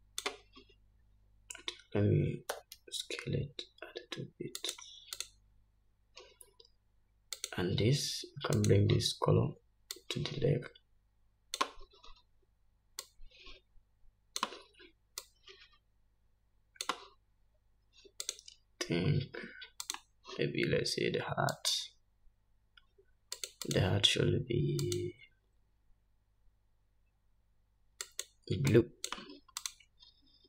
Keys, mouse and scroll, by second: 0.4-6.8 drag, 4.8 s, 7.4 click, 9.6 click, 10.9 click, 12.3-13.8 drag, 15.3-16.7 drag, 17.7-19.2 drag, 20.4 click, 21.1 scroll down 1, 22.1 click, 23.9-25.8 drag, 26.0-27.1 drag.